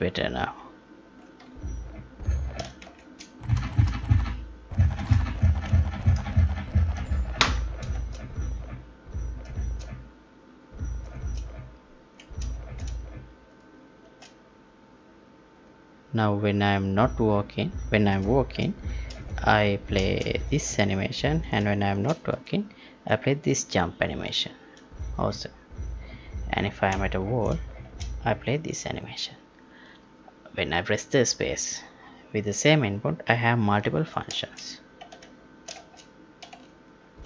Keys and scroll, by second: 7.9 space, 9.5 space, 11.1 space, 12.5 space, 14.0 space, 20.0 space, 21.8 space, 27.8 space, 34.3 space, 35.7 space.